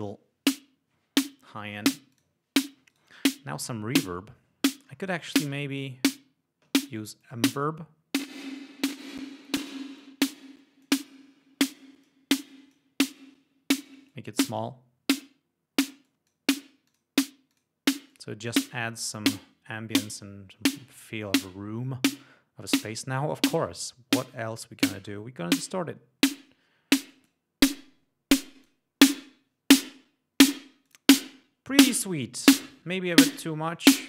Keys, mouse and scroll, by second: 2.2 click, 3.0 right click, 4.9-5.6 scroll down 1, 7.3 click, 9.3-9.7 drag, 10.1-11.1 drag, 11.8-12.3 drag, 12.6-13.0 drag, 14.2-14.9 drag, 16.1 click, 16.9 click, 17.6 click, 18.2 click, 18.8 click, 20.1 right click, 22.2-22.6 scroll down 1, 24.5-25.3 scroll down 2, 25.6 alt+click, 27.2 click, 28.5 click, 30.9 click, 32.0 right click, 32.6 right click, 33.7 click.